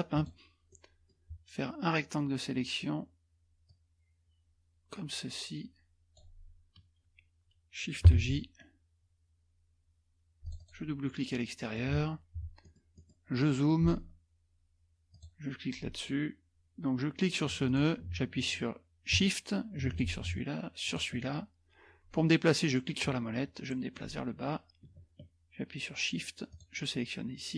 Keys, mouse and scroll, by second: 0.1 click, 0.7-1.5 scroll up 1, 3.7-6.5 drag, 8.1 shift+j, 10.4 click, 11.3-12.1 scroll up 2, 12.6-13.8 scroll up 2, 15.1 click, 17.7 click, 19.9 shift+click, 20.8 shift+click, 22.7 middle click, 22.8-23.4 scroll down 3, 23.1 middle click, 23.4-24.3 scroll up 1, 26.5 shift+click.